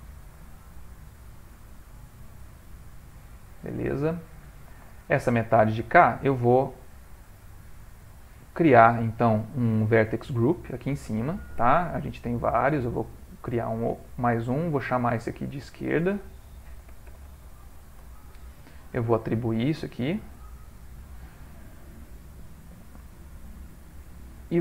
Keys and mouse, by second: 0.9 alt+shift+click, 1.7 middle click, 4.2 ctrl+middle click, 4.5 middle click, 5.0 shift+middle click, 5.2 shift+middle click, 5.5 ctrl+middle click, 6.2 middle click, 6.9 ctrl+middle click, 10.1 click, 11.4 middle click, 12.0 middle click, 12.7 click, 14.1 click, 16.7 click, 20.5 click, 22.9 middle click.